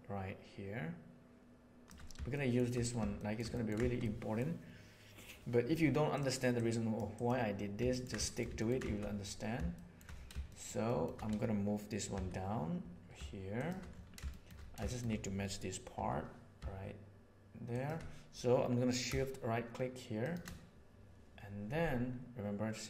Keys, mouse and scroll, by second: 3.1 shift+middle drag, 3.5 ctrl+middle click, 3.9-4.3 middle drag, 6.1 click, 6.5 click, 7.9 ctrl+middle click, 8.2 shift+middle drag, 8.5 ctrl+middle click, 9.7 shift+middle click, 10.5 shift+middle click, 10.9 shift+middle click, 12.1 g, 14.2 shift+middle drag, 14.9 shift+middle click, 16.5 g, 20.2 shift+click.